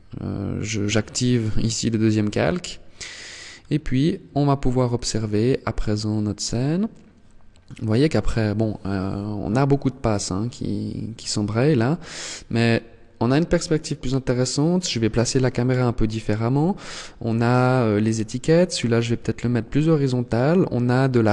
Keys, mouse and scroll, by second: 1.1 scroll up 1, 3.3 scroll up 2.